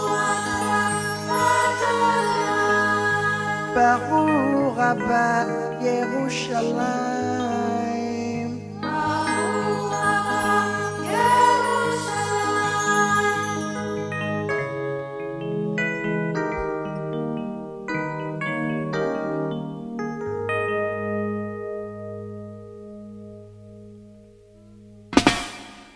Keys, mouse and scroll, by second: 1.1 click, 5.7 click, 11.3 click, 20.2 ctrl+click, 24.1 click.